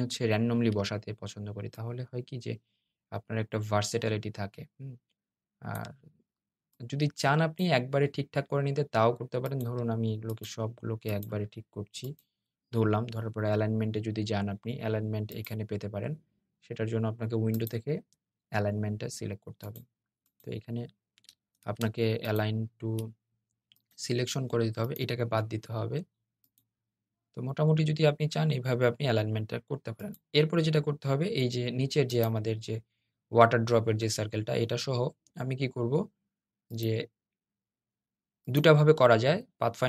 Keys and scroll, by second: 21.3 super+z.